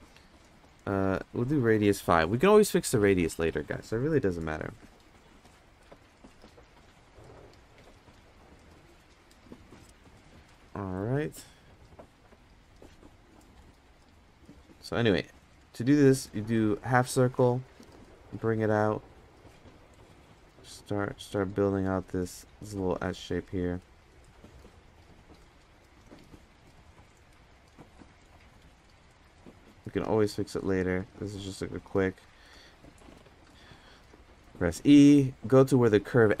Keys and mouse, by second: 1.5-3.2 drag, 14.9-36.4 shift+drag.